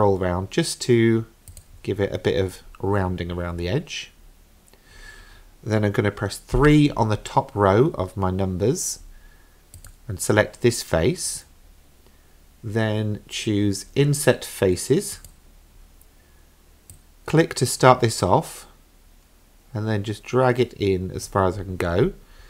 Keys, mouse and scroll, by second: 3.8-5.0 scroll up 3, 6.6 3, 9.8 click, 15.2 click, 16.9-21.3 drag.